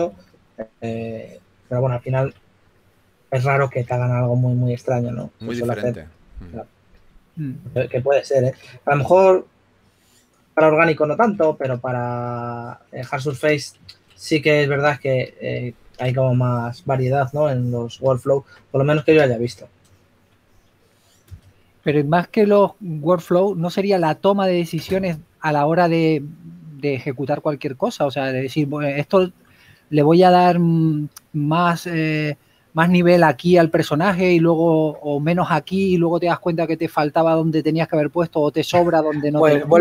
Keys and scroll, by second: 1.2-2.0 typing, 3.9 s, 5.4-6.1 typing, 7.5-9.4 typing, 23.8-24.5 typing, 26.4 typing, 31.9 typing, 35.0 typing, 36.4 w.